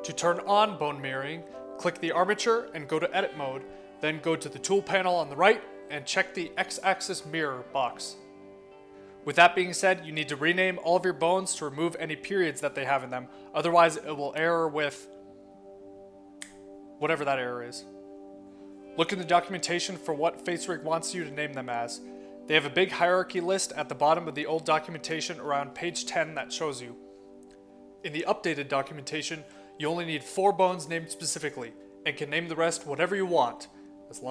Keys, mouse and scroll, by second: 0.9 click, 2.5 click, 3.1 click, 5.5 click, 7.7 click, 10.7 middle click, 15.8 click, 18.4 click, 19.1-20.3 middle drag, 21.0 middle click, 21.2 click, 21.9 middle click, 24.9 click, 26.7 click, 28.6-29.6 drag, 30.6 click.